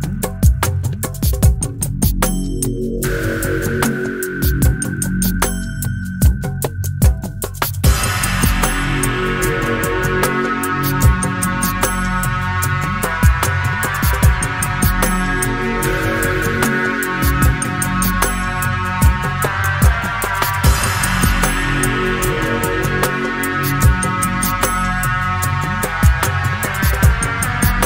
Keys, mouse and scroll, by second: 0.5 middle click, 2.6 click, 3.6 click, 6.6 click, 7.9 click, 9.3 click, 9.9 click, 10.3 click, 10.6 click, 12.3 click, 13.1 click, 14.2 -, 14.8 click, 14.9 middle click, 15.8 middle click, 16.7-18.1 drag, 18.1 click, 19.2 -, 19.7-20.9 drag, 23.7-25.2 drag, 26.0 click, 26.8 click, 27.3 right click.